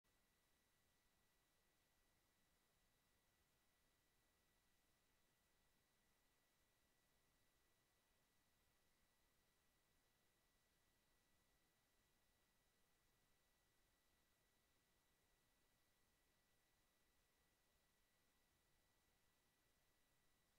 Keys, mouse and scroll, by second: 3.1 click, 5.9-8.4 drag, 10.1 click, 11.2 click, 12.8 click, 13.6 click, 15.4-17.9 drag, 20.1 click.